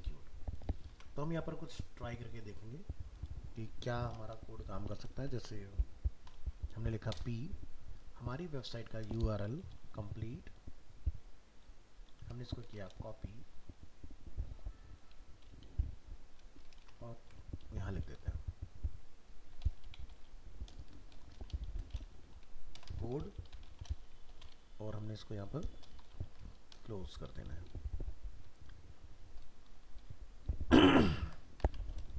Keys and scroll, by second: 0.9 alt+Tab, 12.9 ctrl+c, 17.2 ctrl+v, 31.2 ctrl+s, 31.6 alt+Tab.